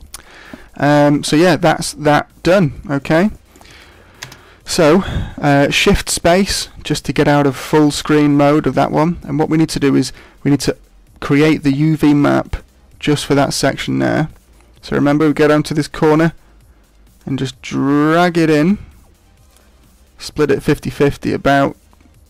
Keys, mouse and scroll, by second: 0.7 middle click, 2.6-3.1 scroll down 3, 3.0 shift+middle click, 3.3 middle click, 4.2 shift+space, 6.1 shift+middle click, 17.2 click, 20.4 click.